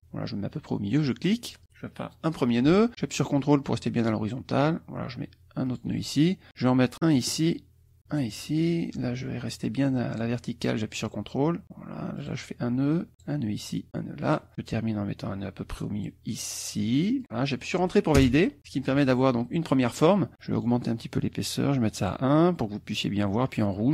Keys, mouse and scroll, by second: 5.7 ctrl+click, 7.2 click, 8.1 click, 12.2 ctrl+click, 13.1 ctrl+click, 14.3 ctrl+click, 18.2 Return, 20.6 right click, 22.0 click.